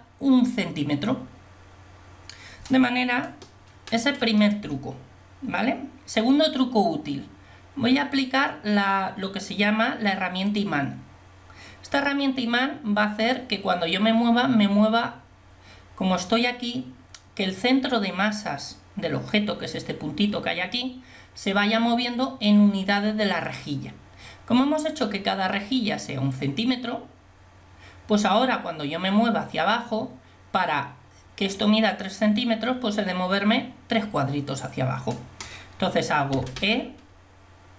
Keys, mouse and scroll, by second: 10.6-36.4 drag, 36.4 e.